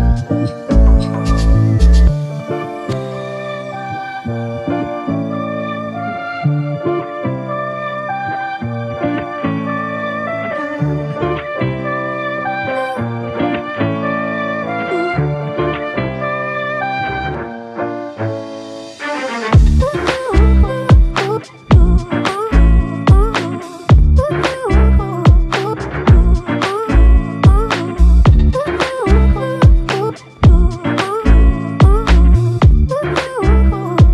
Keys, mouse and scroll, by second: 2.0 alt+click, 7.5 alt+click, 18.0 alt+click, 21.7 double click, 25.4 shift+click, 33.9 alt+click.